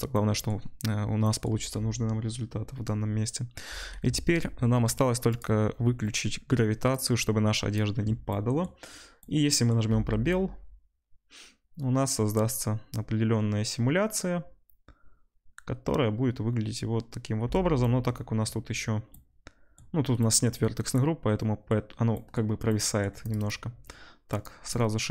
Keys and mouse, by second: 4.1 ctrl+s, 4.1 ctrl+middle click, 10.6-17.5 middle drag, 10.6 space, 17.5 space, 20.5-23.3 middle drag, 23.3-25.1 drag.